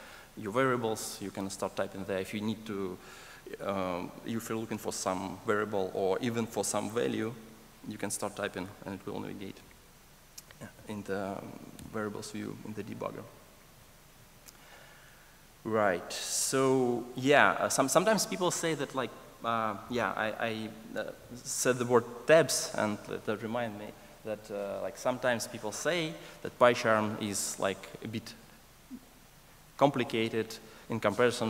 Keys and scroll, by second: 11.7 Escape.